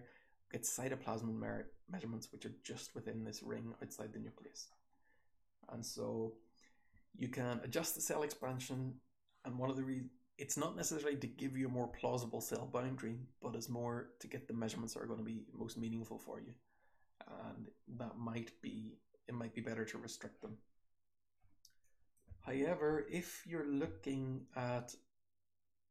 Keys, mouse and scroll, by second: 0.1 scroll down 1, 8.4 click, 8.6 click, 14.7 2, 15.6 2.